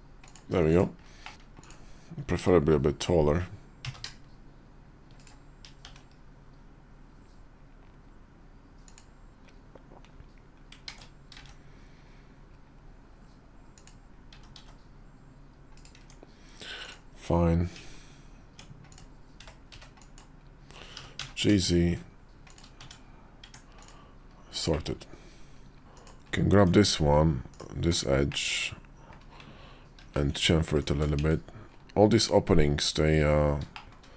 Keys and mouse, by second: 0.6 click, 1.1 middle click, 1.3 `, 1.3 KP_5, 2.1 s, 5.7 shift+s, 10.8 ctrl+z, 11.3 shift+s, 14.2 s, 15.9 Tab, 16.7 click, 17.6 Tab, 19.2 v, 19.6 b, 20.8 g, 22.7 Tab, 23.3 Tab, 24.6 middle click, 25.0 KP_5, 25.8 middle click, 25.9 click, 26.4 Tab, 27.4 click, 28.2 middle click, 29.9 ctrl+b, 31.0 Tab, 31.7-33.8 middle drag.